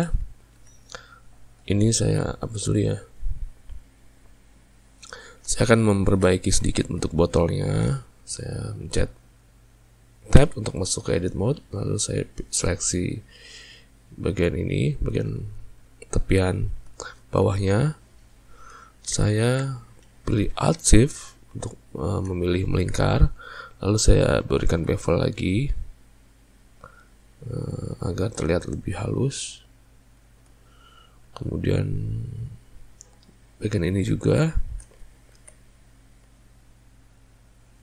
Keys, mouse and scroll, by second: 0.6 ctrl+middle click, 4.6 click, 5.3-7.4 shift+middle drag, 7.4 click, 14.4 click, 16.1-21.8 ctrl+middle drag, 21.8 alt+shift+click, 22.6-24.8 ctrl+middle drag, 24.8 ctrl+b, 30.8-33.3 middle drag, 33.3 click, 34.5 alt+shift+click, 35.5 ctrl+b.